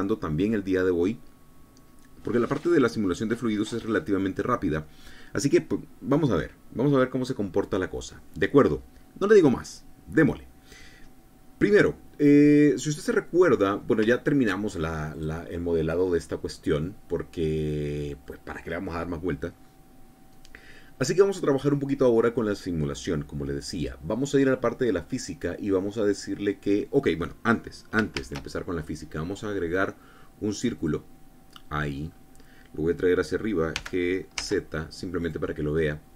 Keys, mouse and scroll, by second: 12.7 scroll down 1, 13.5 middle click, 14.2 scroll up 1, 14.5 shift+middle click, 15.1 shift+scroll up 1, 15.5 click, 16.9 scroll down 2, 17.5-18.8 drag, 24.2 click, 27.6 scroll down 2, 28.6 shift+a, 31.2 click, 32.4-32.8 scroll up 2, 32.8 scroll down 2, 34.2 g, 34.8 z, 35.7 click.